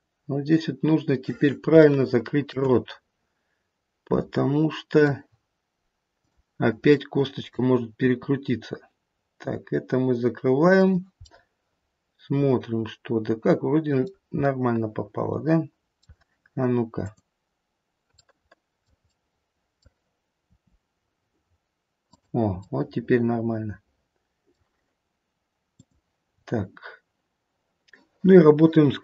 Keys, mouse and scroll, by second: 0.6 middle click, 0.6-1.6 scroll up 2, 1.8 shift+middle click, 2.9 middle click, 6.3 click, 7.1 middle click, 8.1 r, 11.2 scroll up 1, 11.4 middle click, 12.6 middle click, 14.3 middle click, 14.5 middle click, 14.7 middle click, 15.5 middle click, 17.0 click, 18.2 middle click, 18.8 scroll up 1, 19.1 middle click, 19.4 middle click, 20.5 r, 22.6 middle click, 25.9 click, 26.3-27.2 scroll down 2, 28.7-29.0 scroll down 4.